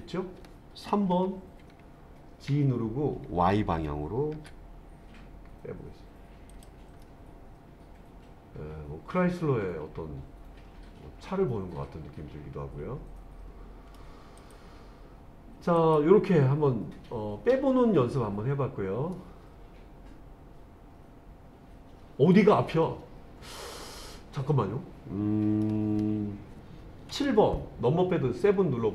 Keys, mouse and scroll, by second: 1.1 KP_3, 2.5 g, 4.4 y, 6.5 click, 7.0-14.0 middle drag, 14.4 click, 15.8 click, 19.1-25.7 middle drag, 27.1 KP_7.